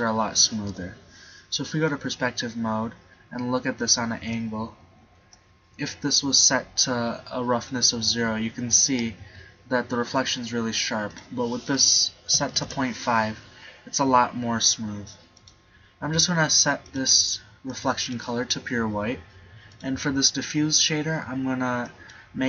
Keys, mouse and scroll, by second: 0.8 KP_5, 4.1 KP_5.